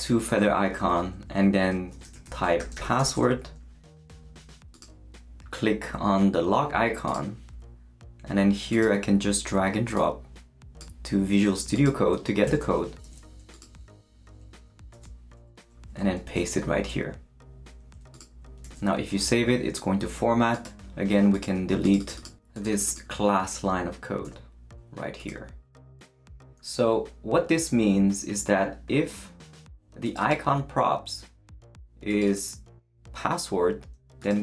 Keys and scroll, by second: 1.8-3.5 typing, 12.4 super+a, 13.0 super+c, 14.9 super+h, 16.2 super+v, 18.6 super+s, 24.2 BackSpace.